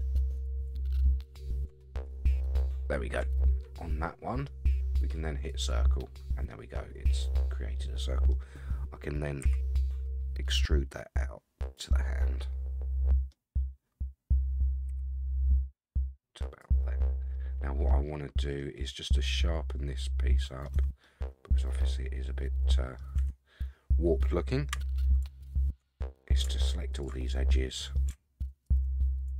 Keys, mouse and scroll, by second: 0.3 click, 1.0 ctrl+click, 2.4 shift+click, 2.8 ctrl+shift+click, 3.3-4.5 middle drag, 5.5 click, 6.5-8.3 middle drag, 9.4 e, 11.9-13.3 middle drag, 14.9 g, 16.8 middle click, 16.8 scroll down 1, 17.5-17.9 scroll up 2, 17.9 middle click, 18.8-20.6 middle drag, 20.7 Tab, 21.0-23.0 middle drag, 23.2 Tab, 23.5 scroll up 3, 24.7 2, 25.4 alt+click, 25.9 middle click, 26.9 alt+shift+click, 27.2 middle click, 28.6 alt+shift+click.